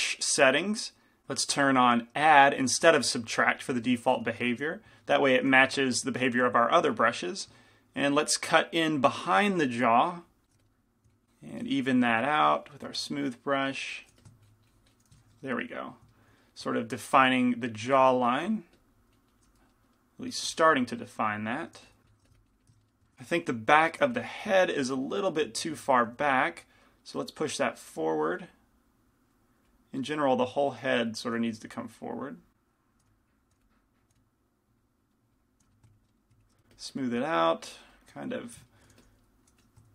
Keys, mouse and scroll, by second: 4.4 f, 5.7 f, 6.9-16.6 middle drag, 8.4-16.6 drag, 10.6 f, 14.2 f, 16.7-18.3 middle drag, 16.9-19.6 drag, 20.6 f, 21.9 f, 22.3 f, 22.8-24.1 drag, 22.8-24.1 middle drag, 24.1 f, 24.1 g, 26.3 f, 27.9-35.5 drag, 27.9-29.3 middle drag, 31.4 f, 33.1 f, 33.6 f, 34.2 f, 35.2 middle click, 35.7 f, 38.3 click, 38.7 middle click, 39.1 f, 39.7 f.